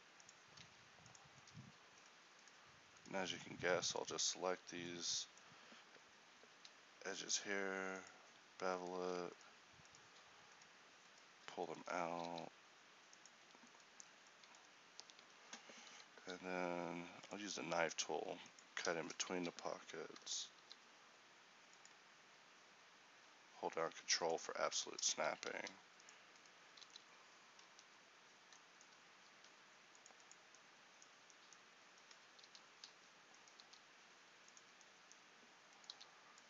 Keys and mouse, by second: 0.7 ctrl+t, 6.6 ctrl+b, 12.4 alt+s, 15.3 a, 16.2 k, 19.4 a, 20.2 j, 20.6 k, 25.6 ctrl+r, 26.8 alt+s, 29.4 ctrl+r, 32.5 g, 33.7 g.